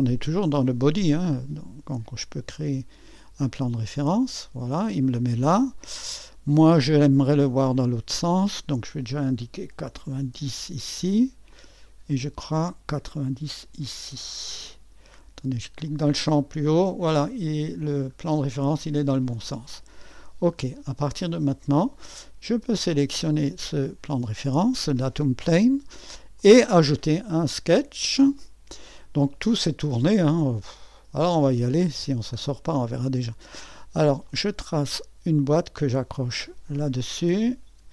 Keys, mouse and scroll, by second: 0.0-2.5 drag, 3.8-4.9 drag, 8.2-9.9 drag, 9.9 KP_9, 10.3 KP_0, 11.5-13.9 drag, 13.9-14.6 typing, 15.8-20.6 drag, 20.4-21.1 typing, 20.6 middle click, 21.1-26.1 drag, 26.4 click, 28.3-29.8 middle drag, 29.8-32.6 scroll up 1, 32.6-34.2 scroll down 1, 34.2-37.9 drag.